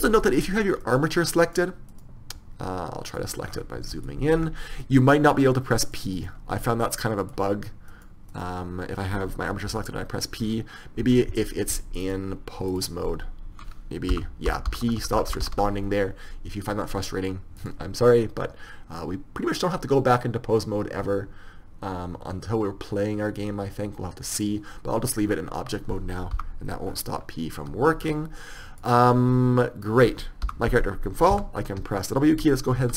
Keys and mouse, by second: 1.2-4.0 drag, 11.4 p, 13.2-16.2 drag, 13.2 p, 28.0 p, 28.8-30.9 middle drag.